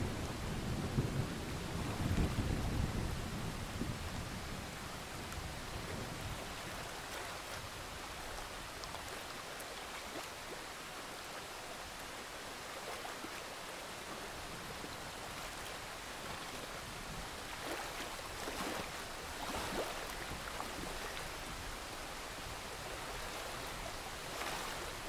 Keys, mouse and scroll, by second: 1.8-3.5 drag, 4.0-4.6 scroll up 1, 4.6-9.5 drag, 10.0-11.4 scroll down 1, 11.4 click, 18.4 alt+click, 19.1 click, 21.4 alt+click, 21.9 click, 22.4 ctrl+z, 23.0-25.0 alt+drag.